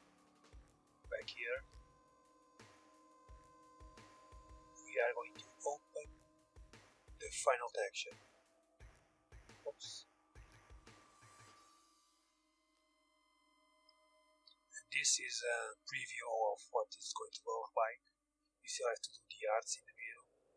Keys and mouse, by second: 1.2-2.5 middle drag, 2.5-4.5 drag, 6.4-8.4 drag, 7.7 a, 7.9 a, 9.3-11.1 middle drag, 11.1 click, 12.9-14.5 drag, 13.4 a, 13.9 Tab, 14.5-20.5 middle drag.